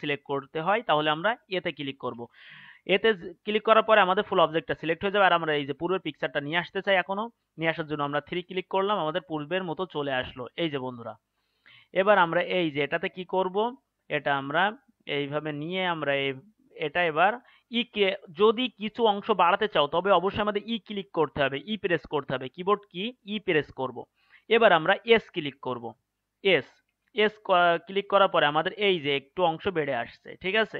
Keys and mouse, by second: 1.6 a, 2.1 a, 8.4 KP_3, 13.2-23.5 middle drag, 23.5 e.